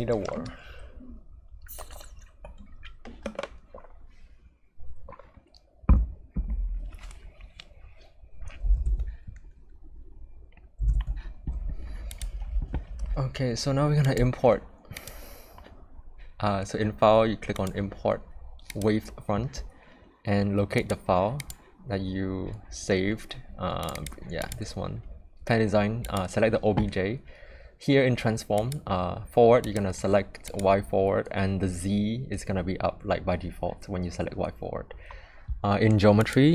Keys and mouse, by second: 10.9 click, 12.1 click, 14.0-18.8 drag.